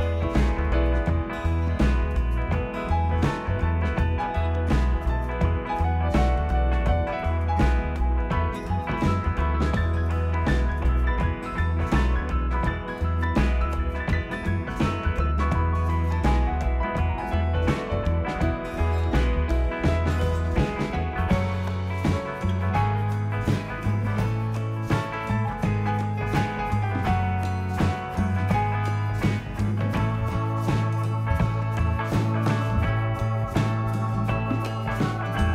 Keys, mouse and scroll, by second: 0.9 click, 1.4-2.5 scroll, 2.5 click, 3.0 click, 7.0 click, 9.4 shift+click, 9.8 shift+click, 10.2 click, 15.0 click, 17.0 click, 17.9 click, 20.0 click, 20.2 s, 21.3 click, 24.3 click, 24.3 s, 24.9 click, 25.4 click, 27.9 click, 27.9 s, 29.0 click, 29.7 click, 32.9 click, 33.6 click, 34.4 click, 35.3 click.